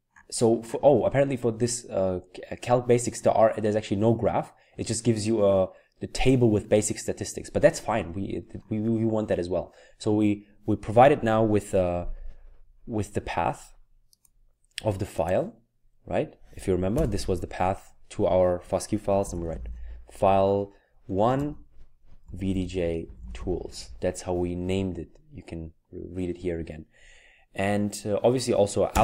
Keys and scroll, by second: 16.9 typing, 19.3 typing, 21.0-23.4 typing.